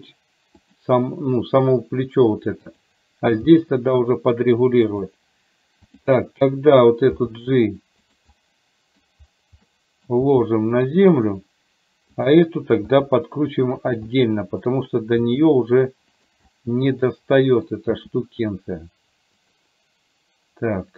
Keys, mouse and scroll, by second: 3.5 g, 6.0 click, 7.3 g, 8.5 middle click, 9.9 middle click, 12.3 click, 13.0 r, 14.1 middle click, 15.3 r, 16.5-17.8 middle drag.